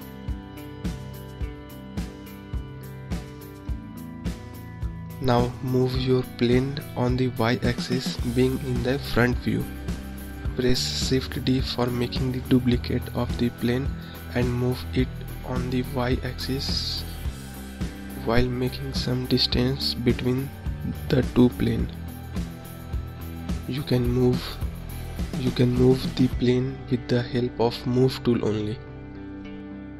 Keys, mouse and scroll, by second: 0.4-1.3 scroll up 2, 1.3-1.8 scroll up 1, 1.8-5.5 scroll down 3, 5.5 ctrl+click, 17.7 shift+d, 19.5 ctrl+click.